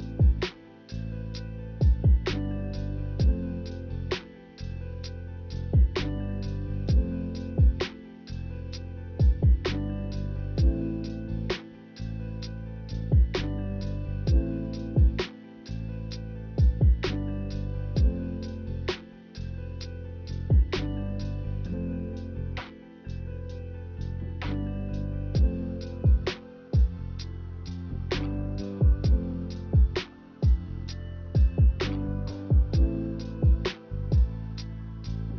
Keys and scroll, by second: 12.1 z, 24.6-26.5 typing, 29.5 k, 32.4-33.2 typing, 34.8-35.3 typing.